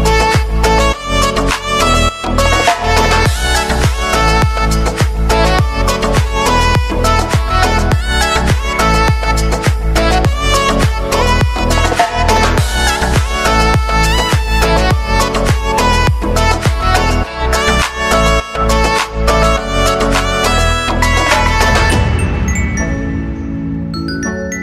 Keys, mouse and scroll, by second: 0.2-2.7 drag, 2.7 space, 4.6-7.6 drag, 7.6 space, 8.4 click, 8.8 ctrl+d, 9.3-10.4 typing, 13.0 click, 13.5 ctrl+d, 14.3-16.1 drag, 16.1 [, 16.6 space, 18.0 click, 18.5 space, 21.1-23.7 drag.